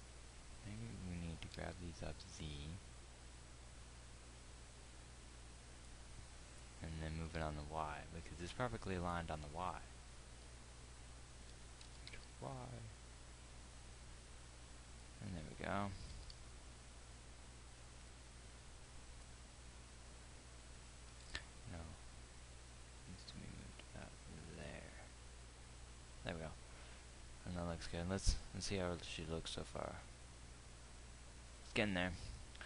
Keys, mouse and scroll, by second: 1.9 g, 7.7 g, 12.5 g, 16.6 g, 21.5 g, 28.7 z.